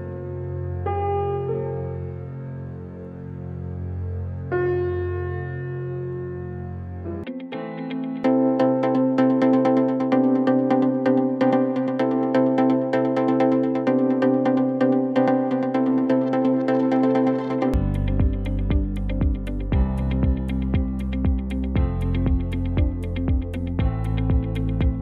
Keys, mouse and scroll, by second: 0.2 ctrl+z, 1.1-3.9 drag, 10.5 scroll down 1, 10.8 alt+click, 12.1 alt+scroll down 1, 12.3-14.8 alt+drag, 14.8 alt+click, 15.9 alt+click, 16.7 alt+right click, 17.6 click, 18.8 ctrl+s, 20.0 alt+click, 20.6 alt+right click, 20.8 alt+click, 22.3 ctrl+s.